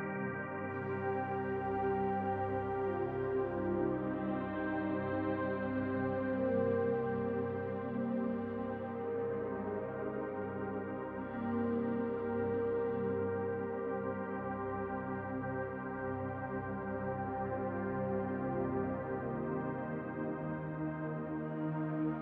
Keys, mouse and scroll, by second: 6.2-7.9 scroll up 5, 7.9 scroll up 1, 7.9 shift+click, 15.3-17.7 scroll down 2, 17.7 click, 21.9-22.2 scroll down 2.